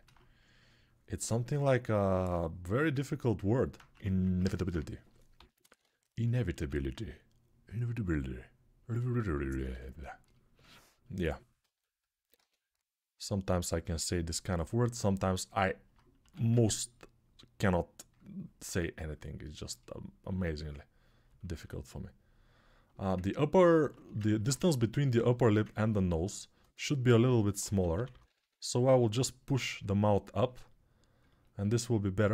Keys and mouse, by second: 1.9-3.4 alt+shift+right drag, 3.4-6.7 alt+drag, 3.7 1, 5.1-6.3 typing, 10.1-14.6 ctrl+alt+drag, 12.1 x, 15.1-21.2 alt+right drag, 16.0 1, 21.2-32.3 ctrl+alt+drag, 27.0-28.1 typing.